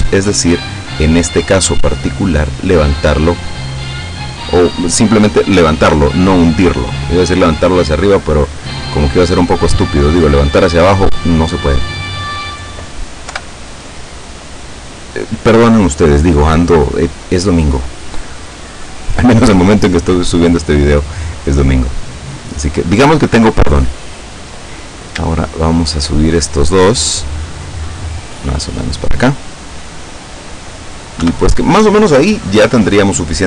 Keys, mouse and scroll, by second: 0.4-2.8 middle drag, 3.4-7.1 drag, 7.7 right click, 8.7-10.7 drag, 11.0-12.6 middle drag, 13.3 KP_7, 14.4-14.8 scroll up 1, 22.1-23.5 middle drag, 24.2 right click, 25.7 shift+right click, 26.3 shift+middle click, 27.5-29.3 drag, 31.3 KP_7.